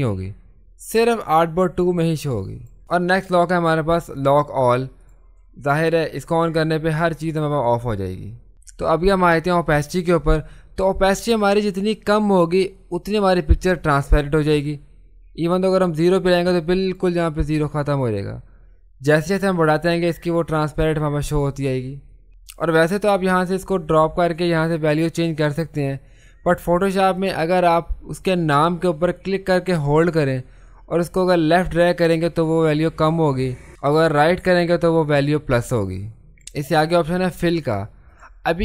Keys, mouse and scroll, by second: 5.0 click, 12.0-19.4 drag, 19.4 click, 23.9-36.0 drag, 38.1 click.